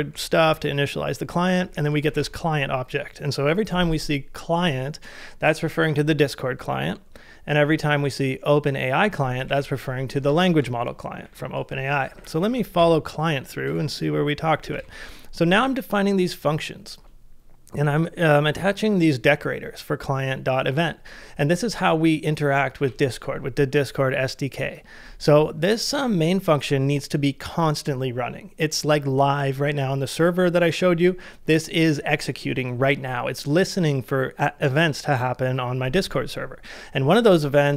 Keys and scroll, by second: 0.4 ctrl+c, 1.8 shift+6, 2.1 shift+v, 9.4 shift+v, 10.3 ctrl+c, 11.2-13.7 typing, 14.7 shift+v.